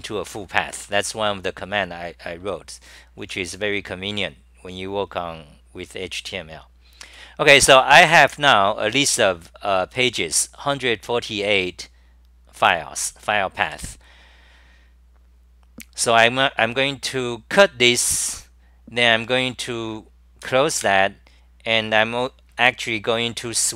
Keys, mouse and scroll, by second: 0.8 scroll, 0.8 w, 2.3 typing, 7.9 s, 8.4 s, 13.0-13.6 typing, 17.5 i, 20.8 super+w, 22.8 scroll.